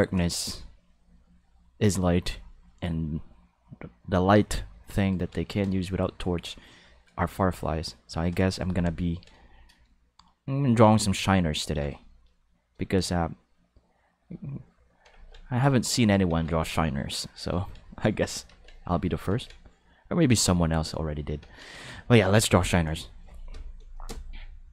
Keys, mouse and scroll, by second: 10.4 ctrl+middle click, 11.1 ctrl+middle click, 12.0 shift+middle click, 14.2 click, 15.6 click, 16.7 click, 17.5 ctrl+z, 17.9 click, 18.7 click, 19.4 ctrl+z, 19.5 click, 20.7 click.